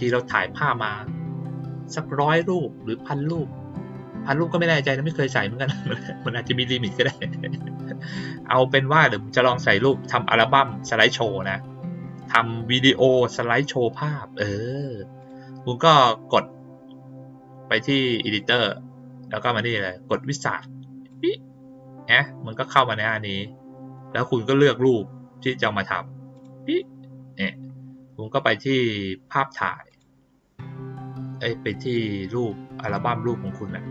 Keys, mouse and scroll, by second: 15.1 click, 18.1 click, 21.0 click, 26.3 click, 29.8 click, 31.9-33.9 drag.